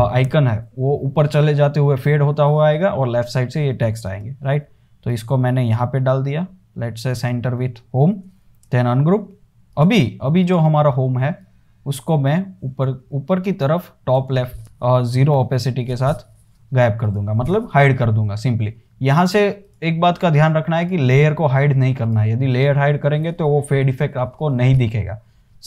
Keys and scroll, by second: 4.3 super+g, 8.8 shift+super+g, 15.5 typing.